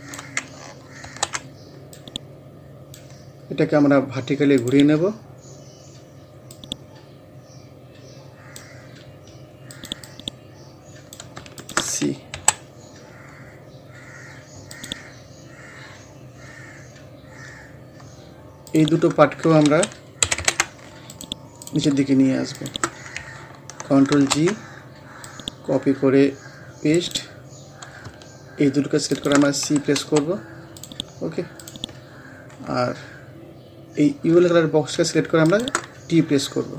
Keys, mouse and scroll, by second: 1.1 ctrl+g, 2.0-4.6 drag, 5.6 scroll up 1, 6.5-9.1 drag, 9.1 scroll up 1, 9.7-11.6 drag, 12.4 c, 13.0-13.5 scroll down 1, 14.7 click, 15.3 scroll down 1, 17.6 scroll up 1, 18.7 click, 19.7 ctrl+a, 20.2 ctrl+u, 21.1 click, 24.2 ctrl+g, 25.3-27.0 drag, 27.0 right click, 29.1 shift+click, 30.0 c, 30.8 click, 33.0 scroll up 1, 35.5 shift+click.